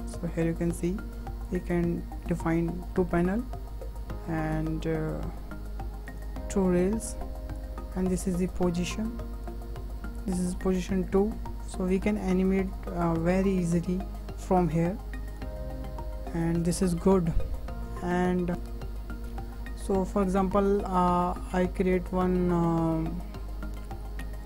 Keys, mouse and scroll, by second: 0.1-1.5 middle drag, 1.5-2.9 drag, 2.9-4.5 shift+middle drag, 4.5-15.8 drag, 15.8-16.4 scroll down 2, 16.4-16.8 scroll up 4, 16.8-17.2 scroll down 1, 17.2-18.5 shift+middle drag, 18.6 click, 19.2 Delete, 19.5 Delete, 24.4 click.